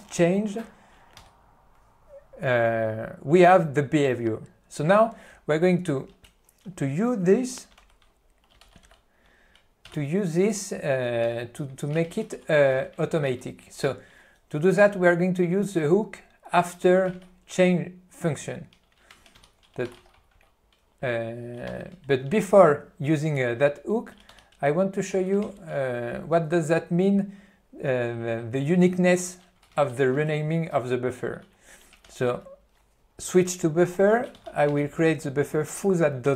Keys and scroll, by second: 1.3 Return, 7.9 Left, 8.7 Right, 8.9 Right, 11.5 p, 12.1 e, 12.4 q, 12.9 ctrl+n, 13.4 alt+w, 17.3 ctrl+n, 19.5 ctrl+g, 20.2 n, 24.3 q, 25.5 ctrl+n, 29.8 alt+w, 32.2 ctrl+e.